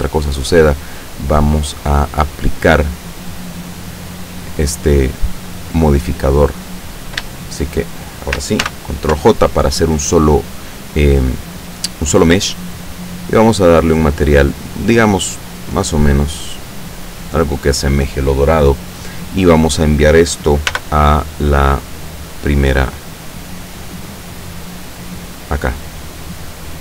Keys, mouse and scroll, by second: 0.2 click, 1.4 click, 1.4 right click, 3.2 click, 7.4 shift+click, 7.4 shift+right click, 8.7 ctrl+shift+j, 13.1 click, 14.3 click, 15.2-17.3 drag, 20.7 m, 22.0 click, 23.1 click, 23.9-24.2 scroll down 1, 24.5-26.0 middle drag, 26.2-26.8 middle drag.